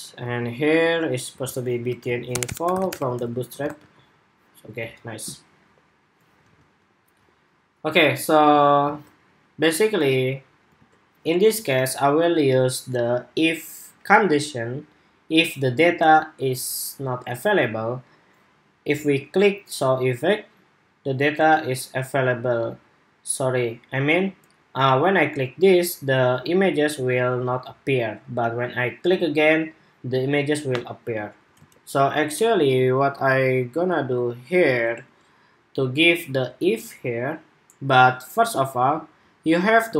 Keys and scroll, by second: 3.2 super+Tab, 3.5 super+r, 8.6 super+Tab, 10.5 super+Tab, 31.3 super+Tab.